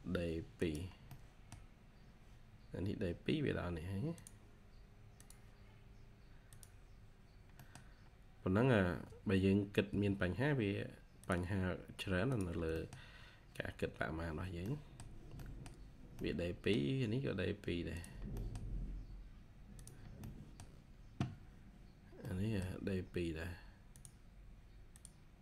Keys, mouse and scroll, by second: 0.9 scroll down 1, 1.0 middle click, 1.6-2.3 scroll down 1, 2.3-3.3 scroll up 1, 7.5 middle click, 9.8 Escape, 12.7 middle click, 12.8-13.6 scroll down 1, 13.6-14.3 scroll up 1, 14.3 scroll down 1, 14.5 middle click, 18.3 middle click, 20.1 middle click, 20.6 scroll down 1, 22.1 middle click, 23.0-24.0 scroll up 1.